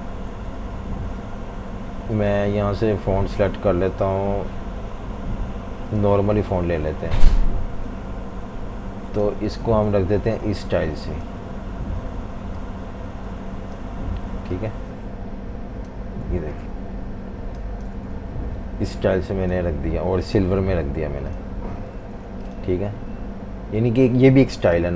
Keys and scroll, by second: 16.2 typing, 17.9 typing, 20.4 i, 21.9 typing.